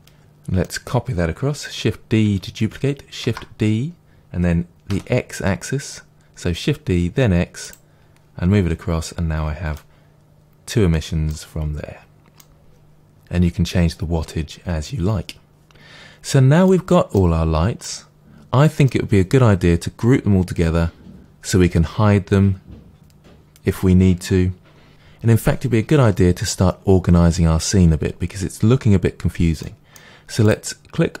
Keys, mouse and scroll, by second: 3.2 shift+d, 5.0 middle click, 7.6 click, 9.7-31.2 middle drag, 11.6 scroll down 2, 15.8-16.2 scroll down 1, 17.3-17.8 scroll down 1.